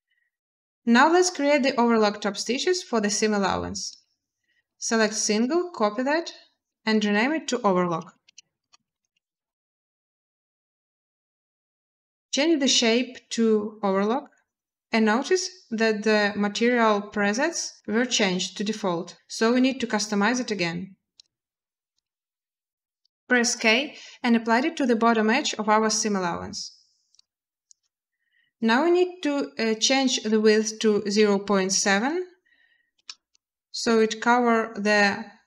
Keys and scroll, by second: 7.6-8.9 typing, 9.9 Return, 23.1 k, 31.5 typing, 32.7 Return.